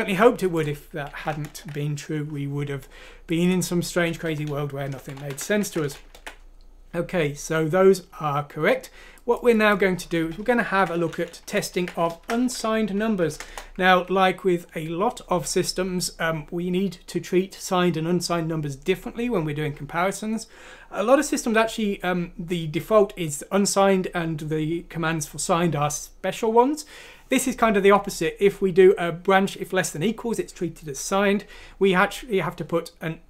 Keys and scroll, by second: 1.5 ctrl+Home, 4.2 Down, 4.5 Down, 4.9 Right, 5.1 Right, 5.6 ctrl+x, 6.1 ctrl+v, 10.7 ctrl+c, 11.2-11.7 typing, 11.5 ctrl+f, 12.9-13.7 typing, 13.9 Escape.